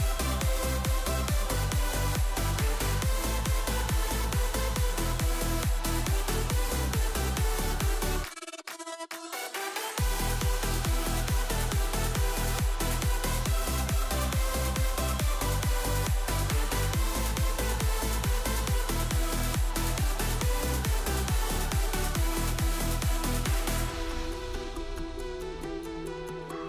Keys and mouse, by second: 0.1 click, 1.5 click, 2.0 click, 2.8 ctrl+s, 3.6 click, 3.8 shift+click, 5.0 click, 5.1 click, 6.0 click, 6.2 click, 6.9-7.3 drag, 7.5 click, 7.7 click, 8.3 click, 8.5 drag, 9.4 drag, 9.7 click, 10.3 click, 15.0 click, 15.4 middle drag, 16.0-17.2 drag, 17.8 click, 18.5 click, 19.0 click, 19.8-21.5 drag, 22.6 click, 22.9-24.7 drag, 25.3 click, 26.4 middle click.